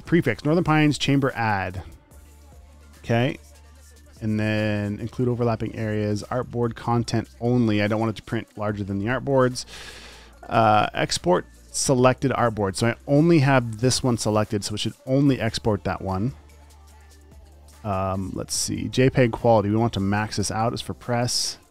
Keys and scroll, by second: 3.8 BackSpace.